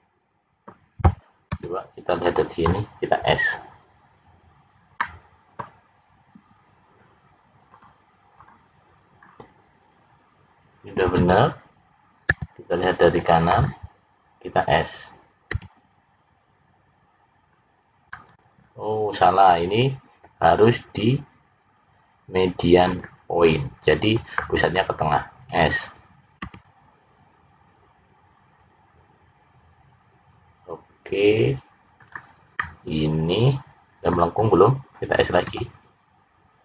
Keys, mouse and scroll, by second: 4.9 middle click, 7.6 click, 9.2-9.7 scroll up 3, 9.9 scroll down 2, 15.4 s, 19.4 click, 26.4 s, 32.5 middle click, 35.4 s.